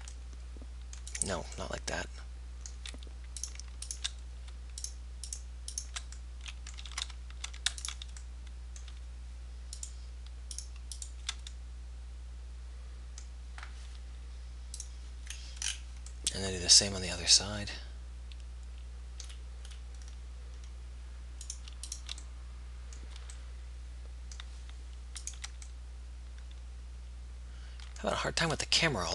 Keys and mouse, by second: 7.4 ctrl+z, 17.2-21.7 middle drag, 21.7 click, 22.7-24.4 middle drag, 26.3 middle click.